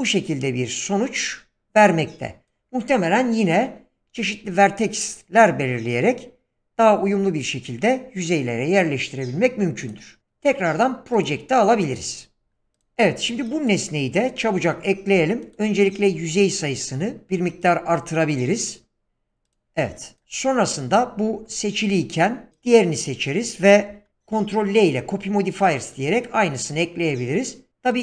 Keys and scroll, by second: 15.1 Tab, 19.1 Return, 21.9 Tab, 24.1 ctrl+l.